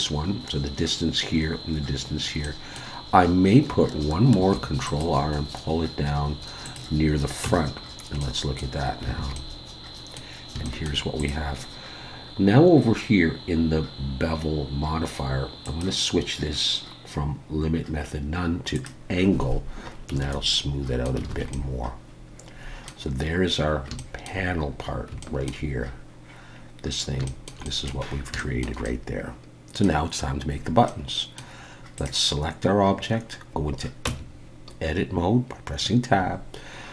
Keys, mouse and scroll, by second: 2.1-2.4 scroll down 1, 2.4 middle click, 4.4 ctrl+r, 7.4 Tab, 7.7-8.2 scroll down 2, 8.2 middle click, 9.2 alt+a, 9.3 middle click, 10.6 shift+middle click, 11.2 click, 15.6 click, 19.7-20.1 scroll down 1, 20.5 middle click, 21.3 alt+a, 21.5 middle click, 23.1-23.5 scroll down 3, 24.0 shift+middle click, 24.5-25.1 scroll up 1, 25.1 scroll up 3, 25.2 shift+middle click, 26.5-27.2 scroll down 5, 27.2 shift+middle click, 27.6 middle click, 28.2 scroll up 1, 28.4 shift+middle click, 28.8 middle click, 30.5 scroll down 1, 30.9 middle click, 32.0 click, 34.1 Tab.